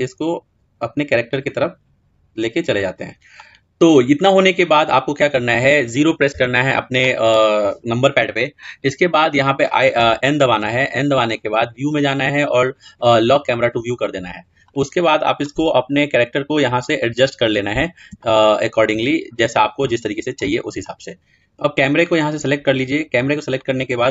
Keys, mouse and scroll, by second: 0.5 r, 2.7-5.8 middle drag, 6.2 KP_0, 11.1 n, 11.2-15.1 drag, 16.5-19.1 middle drag, 19.1-19.7 scroll up 2, 19.7-20.8 shift+middle drag, 20.8-24.1 drag.